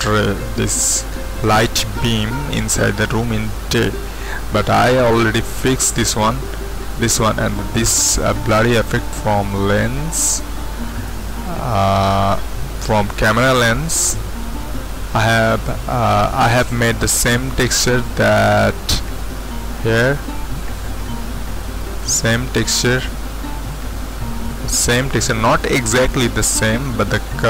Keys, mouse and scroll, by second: 2.6-9.0 middle drag, 6.3-9.0 scroll up 1, 10.1-23.5 middle drag, 23.5-24.5 scroll up 1, 24.5-27.4 middle drag.